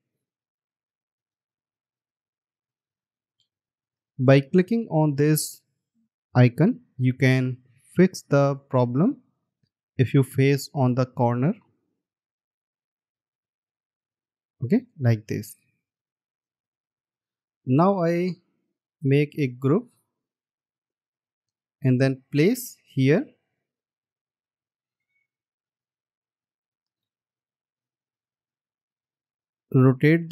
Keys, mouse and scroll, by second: 7.3-8.6 scroll up 1, 10.4-12.6 scroll down 1, 17.0 alt+scroll down 1, 17.0 space, 19.7 right click, 22.2 space, 28.3 alt+scroll up 1.